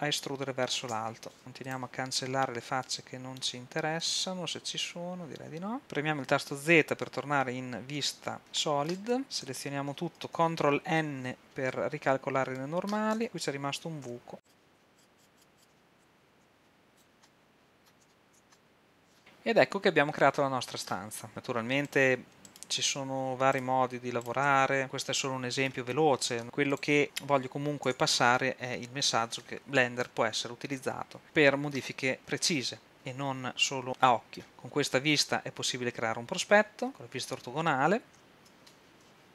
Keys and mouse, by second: 2.9-4.2 middle drag, 7.4 z, 9.5 a, 11.2 ctrl+n, 13.3 z, 14.1 z, 14.7 a, 15.9 f, 16.4 z, 18.0 z, 18.3 Tab, 19.1 KP_5, 21.3 middle click, 23.0-26.4 drag, 24.8 f, 26.4 a, 26.8 click, 27.9 Tab, 30.2-32.9 drag, 34.4 shift+z, 36.9 KP_1, 38.1 KP_3, 38.1 KP_6.